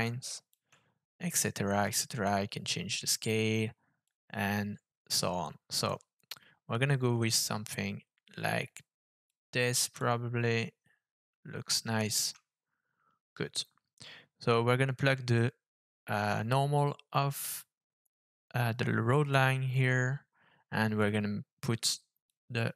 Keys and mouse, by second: 1.9-4.1 shift+drag, 5.8-9.3 shift+drag, 10.0-12.1 shift+drag, 15.3-19.3 drag, 21.0-22.3 drag.